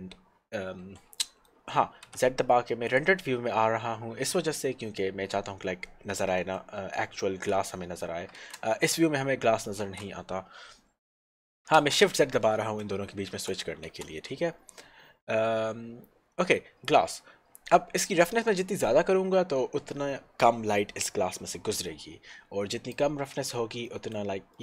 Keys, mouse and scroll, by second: 1.2 middle click, 2.0 z, 3.1 click, 6.3 middle click, 8.5 shift+z, 11.8 shift+z, 17.7 click, 23.9 middle click.